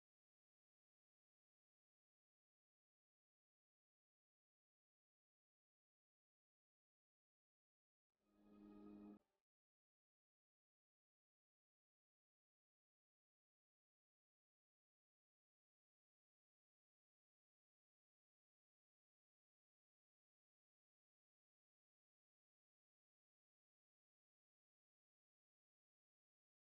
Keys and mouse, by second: 0.6 click, 0.6-1.9 right drag, 1.9-8.7 middle drag, 8.7 s, 17.4-19.1 drag, 17.4-19.1 right drag, 19.1 KP_7, 25.4-26.7 drag, 25.4-26.7 middle drag.